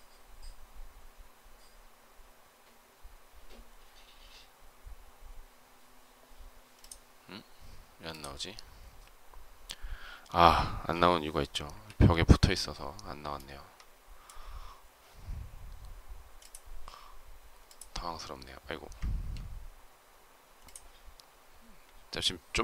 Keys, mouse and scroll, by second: 11.6 Delete, 18.9 ctrl+z.